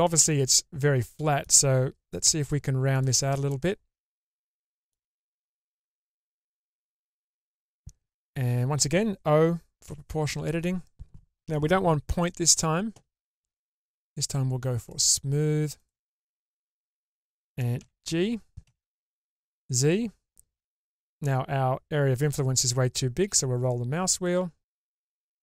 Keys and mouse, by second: 0.2-1.4 middle drag, 2.2 1, 3.5-4.9 middle drag, 5.5-6.8 alt+middle drag, 9.9 o, 13.8-16.4 drag, 17.7 g.